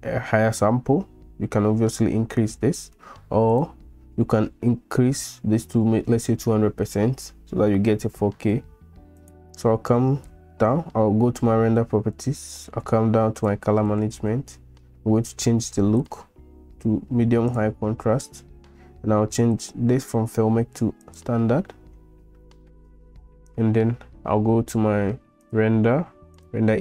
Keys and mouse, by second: 3.5 click, 9.2 click, 16.0-17.7 drag, 19.6-21.2 drag, 25.6-26.8 drag.